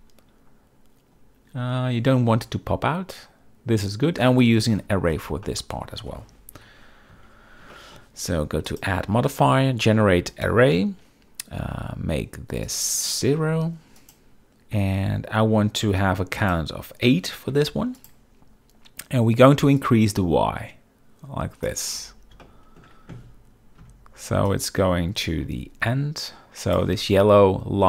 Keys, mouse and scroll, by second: 5.6-5.9 middle drag, 6.7 KP_7, 7.2 z, 7.8 shift+middle drag, 8.8-10.6 drag, 12.8-14.1 drag, 16.5-18.1 drag, 19.9-21.8 drag, 22.5-22.9 shift+middle drag, 24.6-26.9 drag.